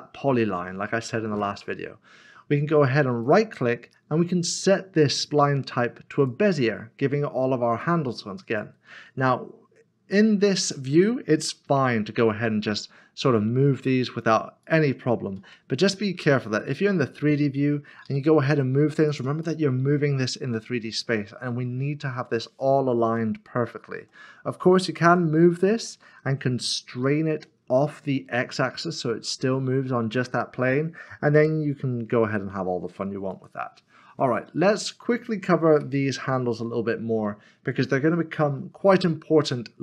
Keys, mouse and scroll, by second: 3.2-5.2 scroll down 1, 6.2 right click, 8.1 click, 11.6 g, 14.6 click, 15.4 ctrl+z, 16.4 middle click, 18.0 g, 19.1 click, 19.4 middle click, 24.0 ctrl+z, 25.3 typing, 28.0 typing, 33.3 typing, 34.5 ctrl+z.